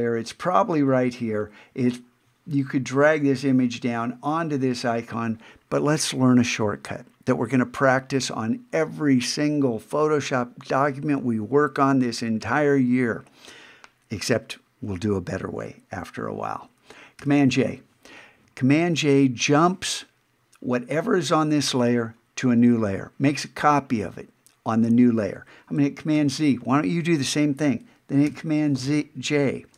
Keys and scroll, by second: 17.2 super+j, 26.1 super+z, 28.3 super+j.